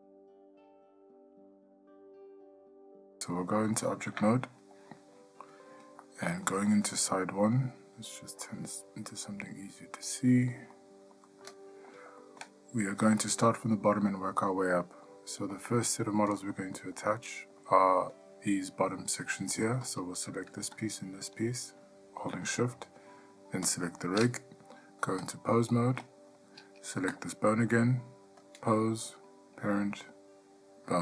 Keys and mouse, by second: 4.2 Tab, 6.2-7.0 middle drag, 8.3 click, 10.9 middle click, 11.7-12.1 shift+middle drag, 12.4 middle click, 15.0 middle drag, 15.7-16.7 ctrl+middle drag, 17.2-17.8 ctrl+middle drag, 20.1 click, 25.5-26.3 drag, 28.6-31.0 drag.